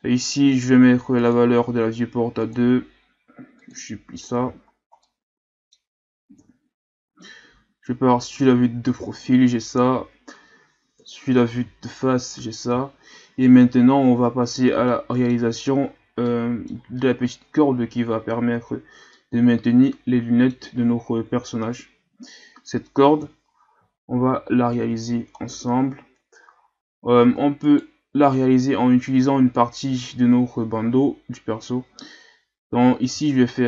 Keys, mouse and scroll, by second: 1.2 click, 2.4-4.4 drag, 4.4 a, 4.7 scroll down 1, 5.0-6.4 middle drag, 6.4 KP_3, 11.0 KP_1, 11.8 shift+scroll down 4, 12.3-13.5 scroll up 6, 14.9-15.6 middle drag, 15.6 scroll up 2, 16.3-17.4 middle drag, 17.4 shift+scroll up 1, 19.1-22.1 middle drag, 23.2 KP_3, 24.1-24.8 shift+scroll up 2, 24.8 Tab, 25.4 ctrl+scroll down 2, 26.1-26.9 scroll up 1, 27.3 Tab, 27.6 right click, 28.1 Tab.